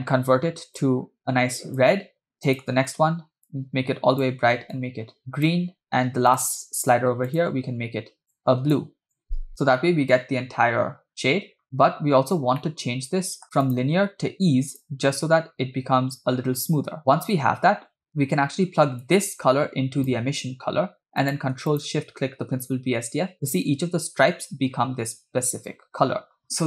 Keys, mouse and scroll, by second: 2.6 drag, 6.3-6.7 drag, 7.5 drag, 12.6 middle click, 13.7-15.1 drag, 18.0 scroll down 2, 19.0 click, 19.3-20.3 drag, 21.5 ctrl+click, 22.1 ctrl+shift+click, 26.6 scroll up 2.